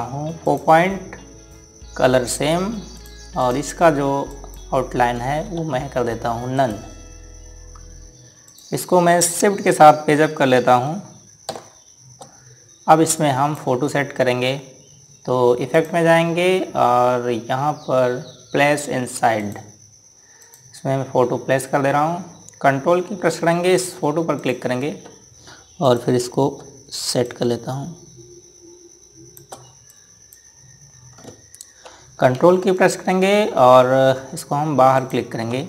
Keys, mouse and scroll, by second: 3.1 right click, 3.7 click, 6.2 z, 7.3 right click, 9.2 click, 12.3 shift+Page_Up, 13.9 click, 20.2 click, 24.7 ctrl+Num_Lock, 25.1 click, 26.6 click, 28.0 click, 30.7 click.